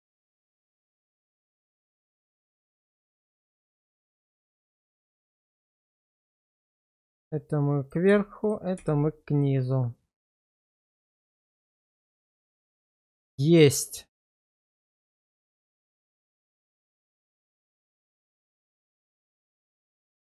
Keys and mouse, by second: 0.0 alt+q, 0.6 click, 6.4 1, 7.0 shift+middle click, 8.5 shift+click, 8.8 1, 9.4-10.9 middle drag, 11.2 middle click, 11.8 middle click, 13.7-15.0 middle drag, 15.5 shift+middle click, 16.2-19.3 middle drag, 20.1 middle click.